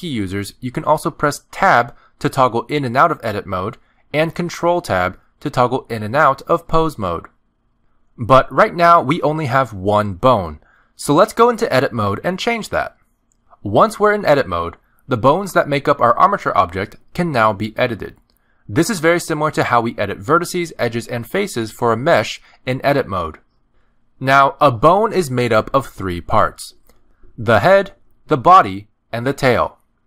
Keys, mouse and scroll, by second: 1.6 click, 3.2 Tab, 4.0 Tab, 4.5 Tab, 5.5 ctrl+Tab, 6.7 ctrl+Tab, 7.7 ctrl+Tab, 9.0 ctrl+Tab, 12.4 click, 16.7-17.8 scroll up 6, 17.8 shift+middle click, 18.4-20.0 scroll up 2, 27.6 click, 27.9 click, 29.0 click.